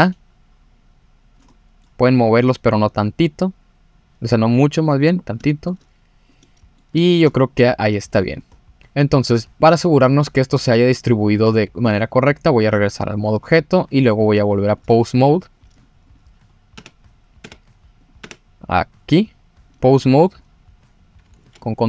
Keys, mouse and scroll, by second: 1.5 middle click, 2.1 click, 5.2 scroll up 1, 5.5 shift+middle click, 5.8 click, 6.4 middle click, 7.0 shift+middle click, 7.4 click, 8.5 scroll down 2, 9.6 click, 10.4 scroll up 1, 10.6 scroll down 2, 11.1-11.6 scroll up 4, 12.4-13.0 drag, 13.3-13.6 scroll down 2, 14.8-15.6 drag, 15.7 click, 16.1 click, 16.5 scroll up 1, 16.7 Tab, 17.4 Tab, 18.0 click, 18.2 Tab, 19.7 click, 19.8 click, 21.4 ctrl+Tab.